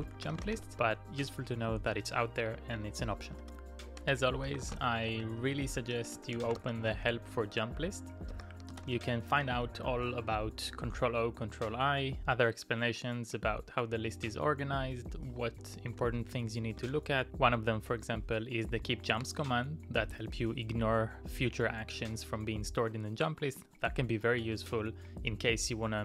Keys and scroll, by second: 0.0-1.0 typing, 3.4-7.0 typing, 8.4-8.9 typing, 10.4-11.1 typing, 14.7 ctrl+d, 15.4 ctrl+d, 15.9 ctrl+d.